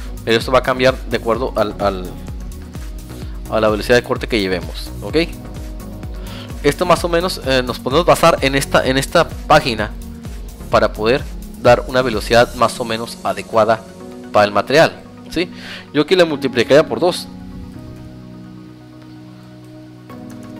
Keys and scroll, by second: 6.1 Tab, 10.6 Tab.